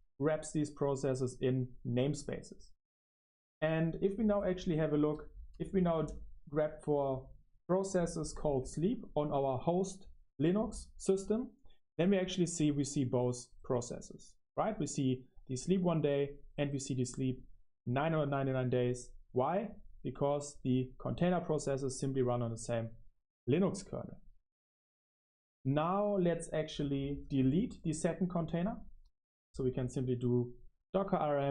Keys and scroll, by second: 8.2-9.4 typing, 10.6-13.2 typing.